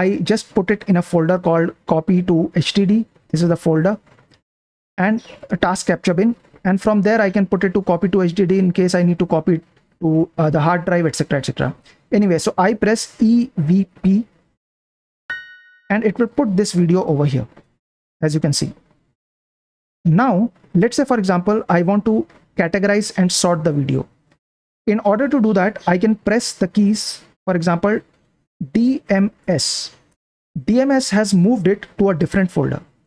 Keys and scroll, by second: 3.5 Left, 4.4 Right, 4.8 Left, 5.1 Left, 5.5 Right, 5.8 Left, 6.1 Right, 7.8 Right, 13.1-15.2 typing, 16.4 shift+g, 28.7-29.8 typing.